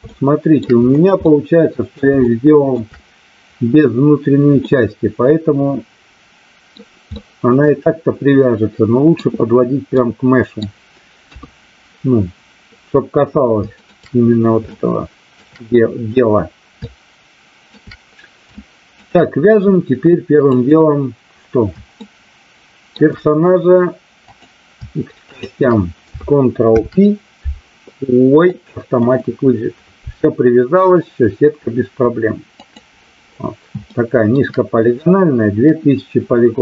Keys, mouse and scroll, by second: 0.1-0.4 shift+middle drag, 1.2-2.0 middle drag, 2.2-2.7 shift+middle drag, 4.6-6.7 middle drag, 7.1-9.2 middle drag, 10.0-10.6 middle drag, 11.2 KP_3, 13.8 shift+middle click, 14.7-15.3 shift+middle drag, 16.8-17.7 shift+middle drag, 18.6-19.0 shift+middle drag, 20.6 click, 22.0-23.1 shift+middle drag, 25.3 shift+click, 26.6 ctrl+p, 32.6 click, 33.8 shift+middle click.